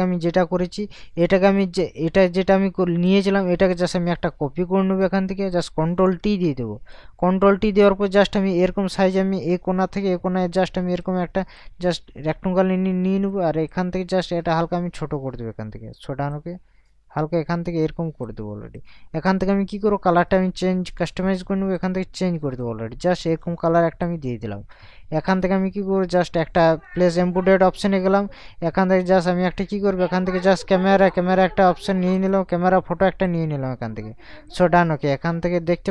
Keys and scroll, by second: 6.2 ctrl+t.